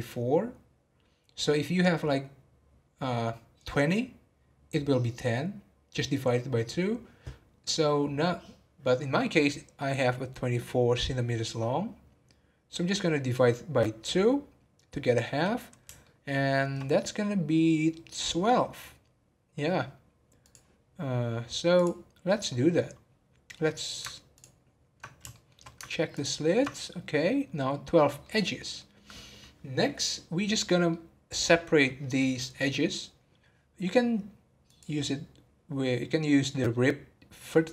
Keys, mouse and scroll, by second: 16.0-19.2 shift+middle drag, 20.4 click, 21.0 scroll up 1, 21.7 click, 24.3 ctrl+click, 25.3 shift+middle click, 26.1 ctrl+click, 27.2-33.8 middle drag, 34.6-37.7 drag.